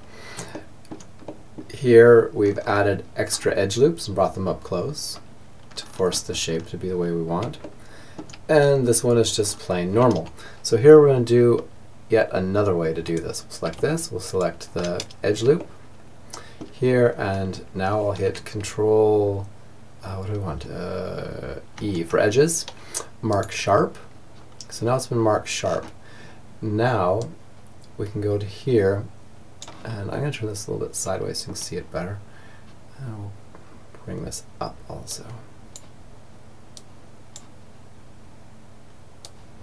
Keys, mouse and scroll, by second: 4.8-6.0 middle drag, 6.6-9.8 middle drag, 12.1-15.0 right drag, 14.6 click, 15.0-16.5 middle drag, 20.8 ctrl+e, 24.6-26.2 middle drag, 26.2-27.9 drag, 29.1-36.4 middle drag, 36.4-38.0 drag, 38.2-39.6 drag.